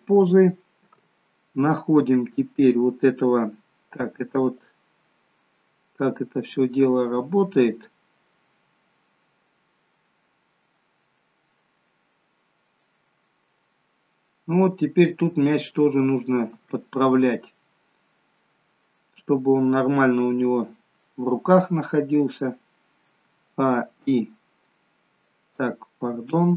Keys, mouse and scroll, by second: 0.1 scroll up 2, 0.3 shift+middle click, 1.1-2.3 scroll up 2, 5.3 click, 19.2-22.2 scroll down 2, 23.8 a, 24.1 i.